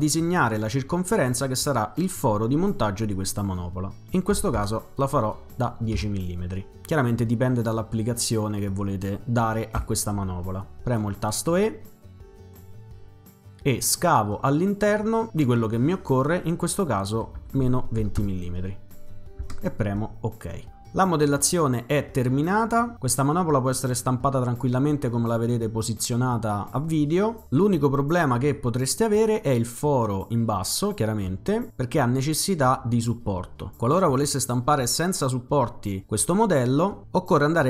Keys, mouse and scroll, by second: 0.0 click, 4.1-5.1 typing, 5.9 Return, 7.6 click, 9.8 e, 11.5 click, 12.5-16.1 drag, 17.4-18.7 typing, 19.4 Return.